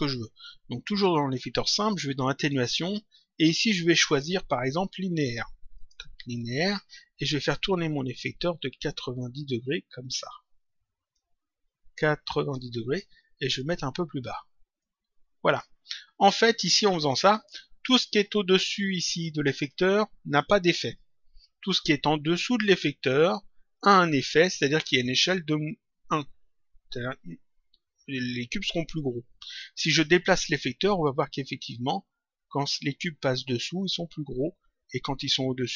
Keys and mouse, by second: 1.1 click, 2.4 click, 4.0 click, 5.7 click, 8.1 click, 9.6 click, 11.1 shift+click, 13.5 click, 14.7 click, 16.5 click, 30.9 click.